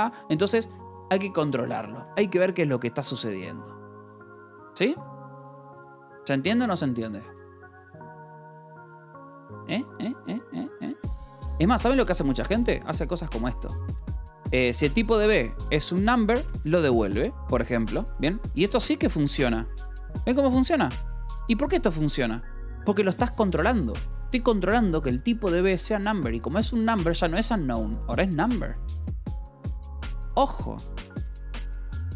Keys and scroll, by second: 0.0-0.2 typing, 2.0 j, 11.8-13.0 typing, 14.5 Return, 15.5 Escape, 15.6 k, 16.4 j, 17.7-21.3 typing, 19.4 Escape, 22.7 k, 23.5 shift+v, 24.1 Escape, 27.2 k, 28.0 j.